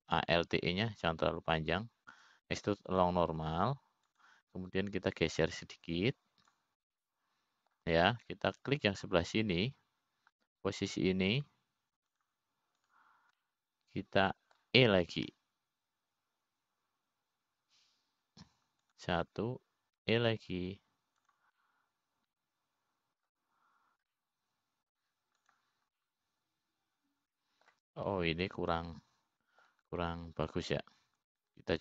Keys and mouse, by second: 1.3 ctrl+z, 3.9 alt+e, 7.9-9.2 drag, 9.4 middle click, 11.3 click, 13.9 click, 14.7 shift+click, 15.4 shift+click, 16.0-17.2 middle drag, 18.0 e, 22.6 e, 24.1-25.8 middle drag, 26.7 middle click, 28.0 click, 28.5-30.3 middle drag, 30.7-31.8 middle drag.